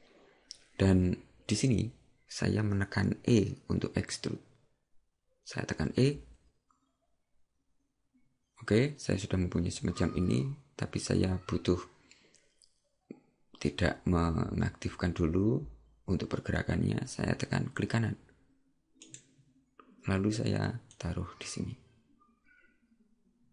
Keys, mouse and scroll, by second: 21.0 click.